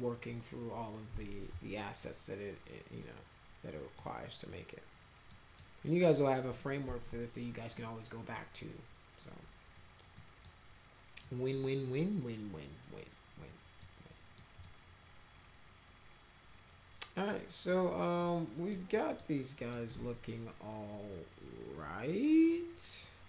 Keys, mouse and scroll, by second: 2.0-4.0 middle drag, 5.3 middle drag, 10.2 middle click, 11.2 middle click, 13.8 middle click, 14.6-17.3 middle drag, 18.2 middle click, 18.9 middle click, 19.4 middle click.